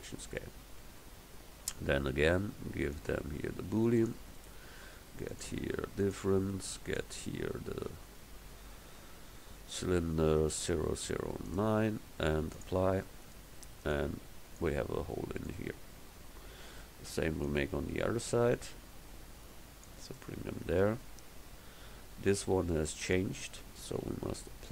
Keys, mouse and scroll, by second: 13.9-15.5 right drag, 16.4 KP_7.